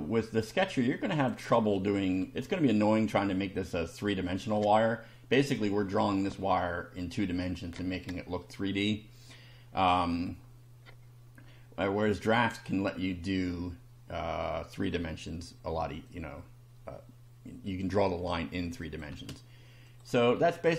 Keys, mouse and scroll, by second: 0.5 click, 1.7 shift+middle click, 2.4 shift+scroll down 2, 5.5 scroll down 2, 6.3-6.9 middle drag, 10.1 click, 12.5-13.0 shift+middle drag, 16.1-18.5 drag, 18.8 click, 19.1 space, 19.9 click.